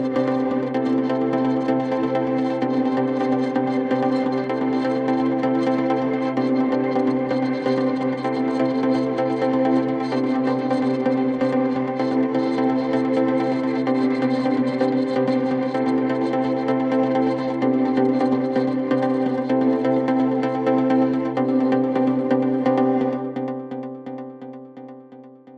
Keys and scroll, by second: 14.3 F3, 25.3 F3.